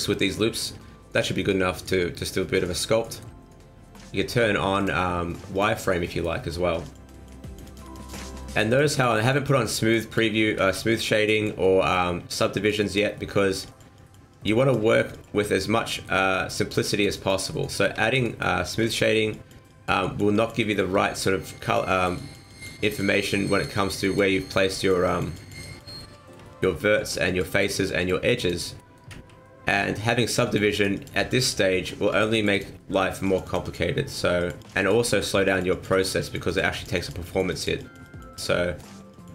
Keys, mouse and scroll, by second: 1.8 click, 3.1 middle click, 4.8 click, 6.1 middle click, 6.4-6.8 scroll up 1, 6.8 click, 7.1 click, 7.4 click, 7.7 click, 7.8 click, 8.0 click, 8.3 middle click, 8.6 click, 8.9 click, 9.1 click, 9.3 click, 9.5 click, 9.7 click, 10.0 click, 10.6 ctrl+z, 10.9 click, 11.1 click, 11.3 click, 11.6 middle click, 12.3 click, 12.5 click, 12.8 click, 13.1 middle click, 13.7 click, 13.9 click, 14.3 click, 14.6 click, 15.1 click, 15.4 middle click, 16.5 click, 16.8 click, 17.1 click, 17.5 middle click, 18.0 shift+middle click, 18.3 middle click, 18.7 scroll up 1, 18.9 shift+middle click, 19.3 click, 19.7 click, 20.0 click, 20.3 click, 20.6 click, 20.9 click, 21.3 click, 21.5 click, 21.9 click, 22.1 click, 22.5 click, 22.8 click, 23.1 click, 23.5 click, 23.7 click, 24.0 click, 24.4 middle click, 24.7 click, 25.1 click, 25.3 click, 25.6 click, 26.0 middle click, 26.4 shift+middle click, 26.9 click, 27.3 click, 27.5 click, 27.7 click, 28.0 click, 28.3 click, 28.7 middle click, 29.1 ctrl+z, 29.4 middle click, 30.4 click, 30.7 click, 30.9 click, 31.2 click, 31.3 click, 31.7 middle click, 32.1 click, 32.3 click, 32.5 click, 32.8 middle click, 33.3 click, 33.5 click, 33.6 click, 33.9 middle click, 34.4 click, 34.6 click, 34.8 click, 35.0 middle click, 35.5 click, 35.7 click, 35.9 click, 36.2 click, 36.5 click, 36.7 click, 36.9 click, 37.3 click, 37.5 click, 37.8 click, 38.0 click, 38.3 click, 38.5 middle click, 39.1 click.